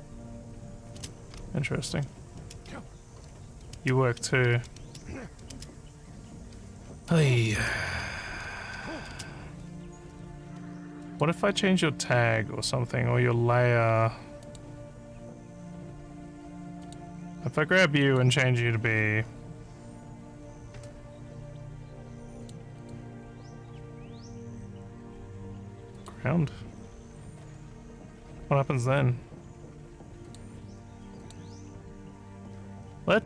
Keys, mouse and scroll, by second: 0.4-2.7 typing, 3.7-8.0 typing, 9.1 space, 11.0 click, 14.4 click, 16.8 click, 18.0 click, 22.4 click, 22.8 click, 26.0 click, 30.3 click, 31.2 click.